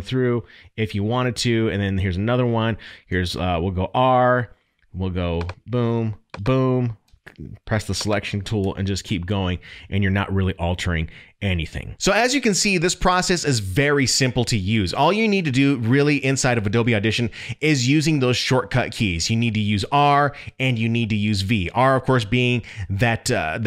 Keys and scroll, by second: 8.6 Delete.